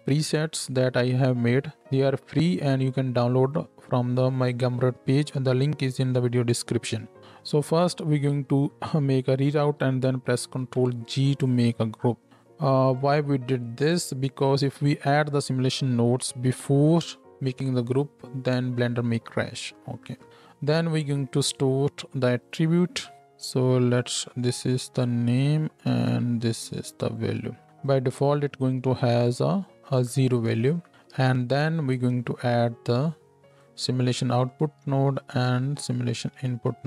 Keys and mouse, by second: 7.9-12.3 shift+drag, 10.4 ctrl+g, 12.3 ctrl+x, 22.1 shift+a, 23.2-23.9 drag, 30.7-35.0 shift+right drag, 30.9 shift+a, 34.8 shift+a, 35.0-36.8 drag.